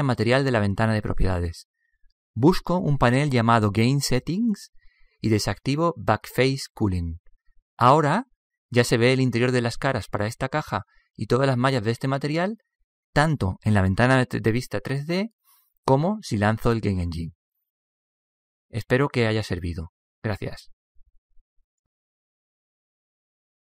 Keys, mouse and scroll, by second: 0.0-2.9 drag, 5.2-7.1 drag, 7.7-9.6 drag, 8.6 middle click, 9.4-10.6 middle drag, 17.2 Tab, 18.5 p.